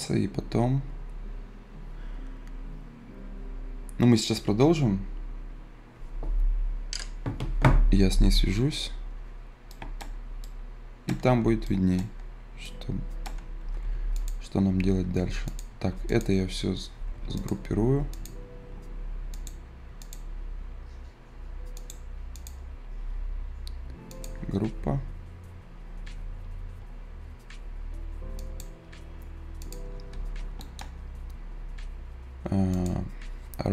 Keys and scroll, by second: 13.6 Escape, 15.3 Escape, 17.0 Escape.